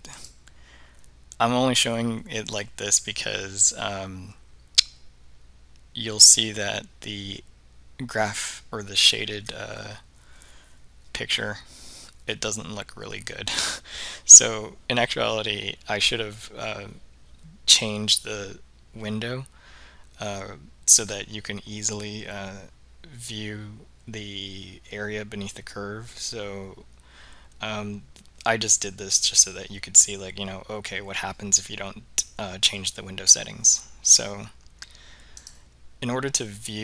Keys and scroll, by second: 0.2 Return.